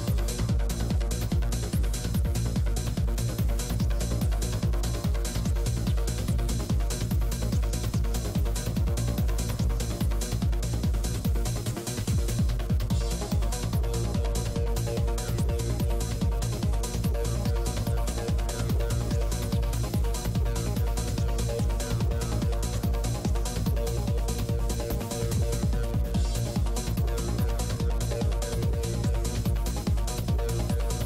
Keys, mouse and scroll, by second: 1.5 p, 1.7 f, 2.1-3.5 drag, 3.1-4.8 middle drag, 4.3 shift+c, 4.4 f, 5.0 shift+f, 5.2-6.4 drag, 5.2 middle click, 7.5 click, 9.4-11.4 middle drag, 12.4 click, 14.5 click, 18.4 click, 18.8-20.0 middle drag, 19.4-22.8 drag, 20.8 middle click, 22.8 middle click, 23.4-29.1 drag, 23.4 right click, 29.0 right click, 29.1-31.0 middle drag.